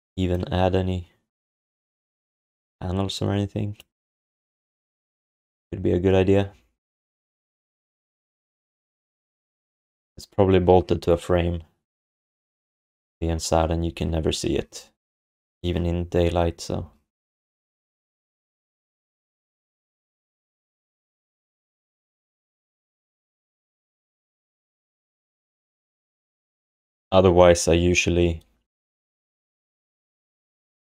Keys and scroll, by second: 5.3 ctrl+s.